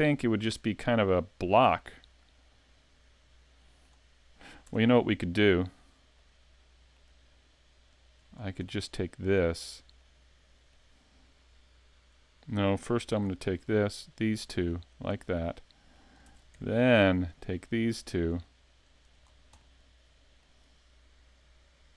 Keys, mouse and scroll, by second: 0.4 middle click, 2.1 scroll down 1, 2.3 middle click, 4.7 Tab, 5.5 right click, 6.2 middle click, 7.9 shift+right click, 8.3 scroll down 2, 8.7 middle click, 10.0 middle click, 13.1 ctrl+r, 15.6 middle click, 16.2 ctrl+Tab, 17.3 right click, 17.6 middle click, 18.8 shift+right click, 19.2-19.6 scroll down 4, 19.6 middle click.